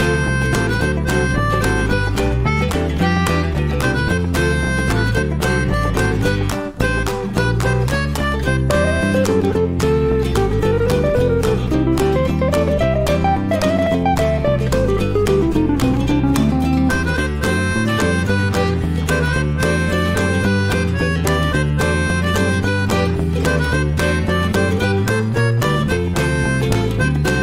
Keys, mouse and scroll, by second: 0.0 scroll up 2, 0.3-2.2 middle drag, 2.2 drag, 2.7 alt+middle click, 3.1-3.5 shift+middle drag, 3.5 Tab, 4.1 Tab, 4.3 click, 5.2 click, 6.8 ctrl+shift+x, 7.6-8.7 shift+middle drag, 8.7-9.1 shift+scroll up 1, 11.4-14.4 shift+middle drag, 14.9-15.5 middle drag, 15.5-15.8 scroll down 2, 15.8-16.6 middle drag, 16.6-17.0 scroll down 4, 17.0 middle drag, 17.2-17.6 scroll up 1, 18.7 middle drag, 19.0 scroll up 1, 19.1 scroll down 1, 19.3 click, 19.6-20.3 middle drag, 20.3 s, 22.6 middle drag, 22.9-23.8 scroll up 5, 23.1 shift+middle drag, 23.8-24.2 middle drag, 24.4 shift+middle click, 24.6 scroll up 1, 24.8-25.8 middle drag, 25.8 click.